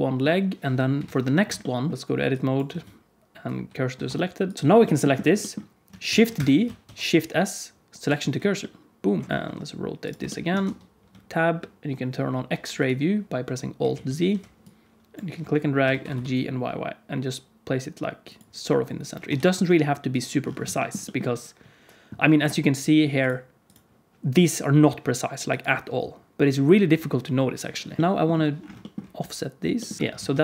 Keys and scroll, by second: 0.7 KP_1, 0.9 KP_3, 2.5 Tab, 2.7 shift+s, 4.0 Tab, 6.0 shift+d, 6.8 shift+s, 9.2 KP_1, 9.2 KP_3, 9.4 r, 10.6 Tab, 13.8 alt+z, 14.1 alt+z, 15.8 g, 19.2 Tab, 19.6 r, 28.0 shift+KP_1, 29.1 g, 30.0 KP_5, 30.1 alt+z.